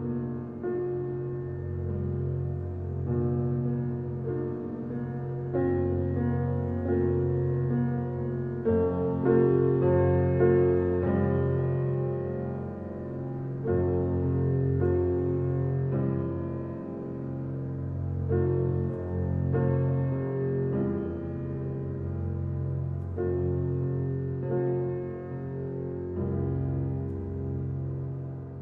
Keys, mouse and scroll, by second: 2.8-3.4 middle drag, 3.4 click, 3.7-5.4 middle drag, 5.4 alt+h, 6.1-9.3 middle drag, 9.7-10.3 middle drag, 10.3-10.9 scroll down 1, 10.9 a, 13.0 click, 14.0 click, 14.9 click, 15.9 click, 18.1 click, 19.6 click, 19.9 click, 21.8 click, 23.8-24.6 middle drag, 24.6-25.5 scroll up 2, 25.5 Tab, 27.8 ctrl+KP_Add.